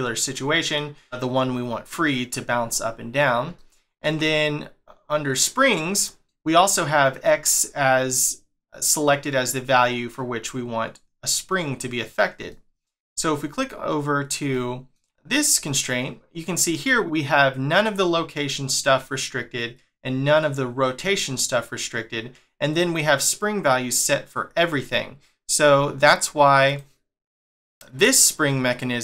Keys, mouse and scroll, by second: 0.3 middle click, 3.6 shift+middle click, 12.5 shift+middle click, 13.6 click, 14.5 shift+middle click, 25.0-26.7 scroll down 1, 26.7 click, 27.5 click, 27.9 click.